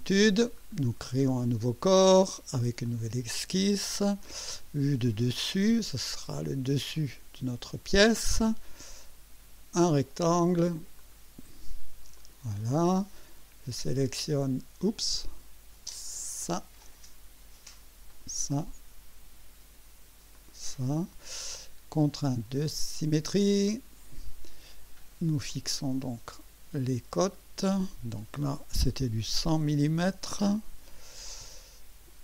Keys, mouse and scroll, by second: 0.5 click, 2.8 click, 5.3 click, 6.9 click, 9.7 click, 11.0 click, 12.1 click, 12.6 right click, 14.4 click, 15.1 click, 16.4 click, 18.1 click, 20.3 click, 23.7 click, 25.5 click, 27.1 click, 29.0 KP_1, 29.4 KP_0, 31.4 Return.